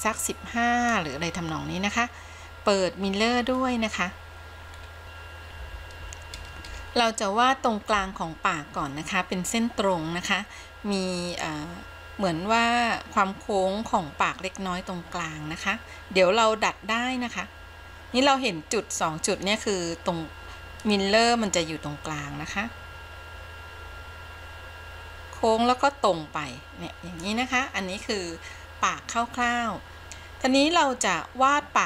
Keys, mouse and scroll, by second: 4.8 scroll up 1, 21.2-27.7 drag.